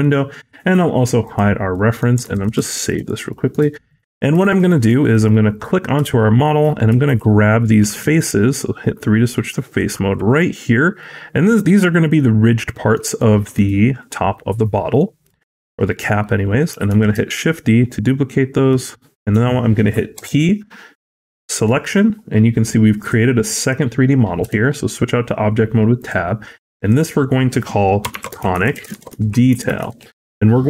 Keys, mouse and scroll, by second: 1.1 click, 1.6 middle click, 2.2 ctrl+s, 2.6 shift+middle click, 2.8 scroll up 1, 3.2 middle click, 3.6 shift+middle click, 3.8-4.1 scroll up 2, 4.3 shift+middle click, 4.6 middle click, 5.0 click, 5.9 Tab, 6.4 scroll up 1, 6.9 alt+click, 7.7 3, 9.6 alt+click, 10.9 middle click, 13.1 shift+middle click, 14.0-14.8 scroll down 2, 14.9 middle click, 16.8 shift+d, 22.9 click, 23.5 click, 24.3 Tab, 25.9 click, 26.7 click, 26.8 click.